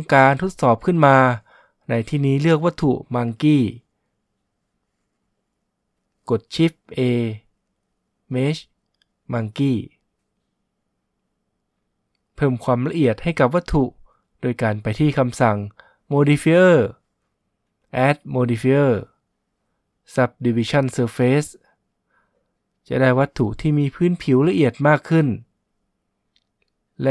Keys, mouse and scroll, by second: 1.9 shift+a, 18.1-21.7 drag, 25.1-26.8 drag.